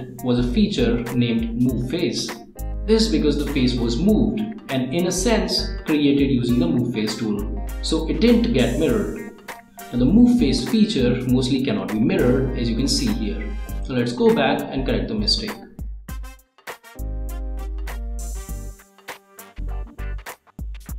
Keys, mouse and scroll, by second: 2.3 click, 4.4-5.0 scroll up 1, 5.8 scroll down 1, 11.0 click, 11.2 click, 12.6 click, 13.7 click, 15.0 click, 15.7 Delete, 17.0-18.2 drag, 20.0 click.